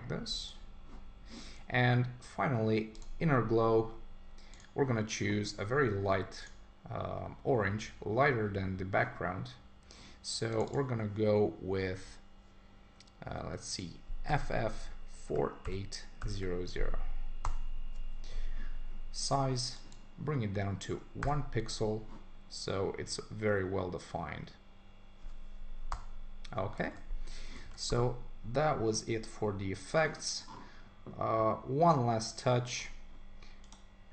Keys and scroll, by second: 17.4 Return, 25.9 Return, 26.8 super+s, 27.6 super+1.